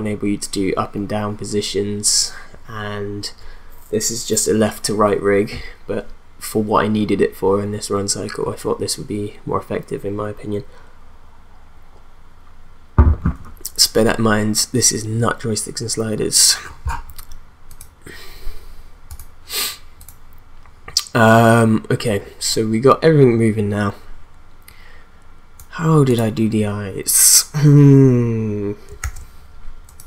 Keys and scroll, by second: 29.0 ctrl+s.